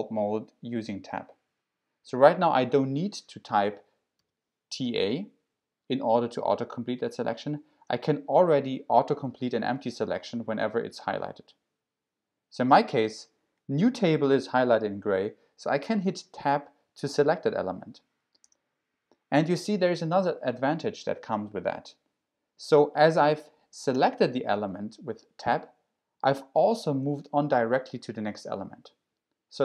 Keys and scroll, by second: 4.2 t, 4.8 a, 7.4 BackSpace, 7.7 BackSpace, 18.5 Tab, 23.3 shift+Tab, 23.9 BackSpace, 27.0 Tab.